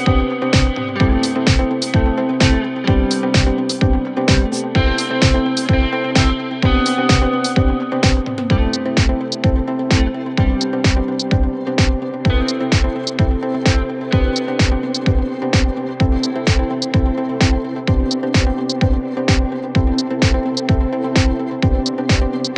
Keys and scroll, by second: 16.1 f, 21.1 f.